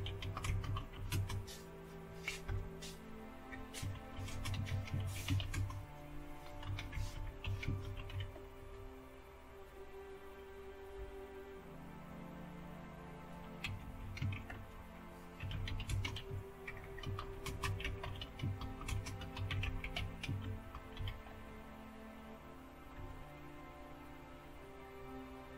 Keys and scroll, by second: 0.0-1.4 typing, 2.4-9.0 typing, 13.4-21.8 typing, 22.9 typing.